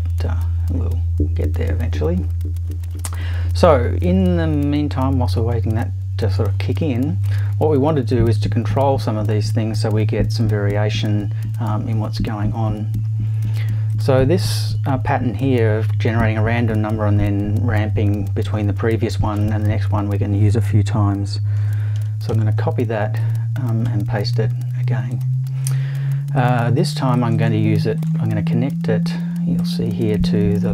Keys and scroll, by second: 21.9 super+c, 22.3 super+v.